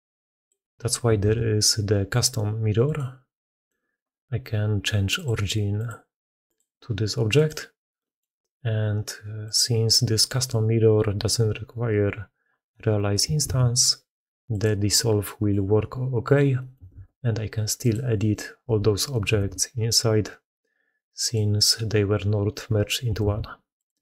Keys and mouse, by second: 0.3 middle click, 1.1 ctrl+x, 3.3 middle click, 5.0-5.7 middle drag, 7.9 middle click, 9.3 middle click, 12.6 middle click, 13.3 ctrl+x, 15.1 middle drag, 16.4 middle click, 16.8 ctrl+x, 18.5 g, 19.2 ctrl+x, 23.1 ctrl+x.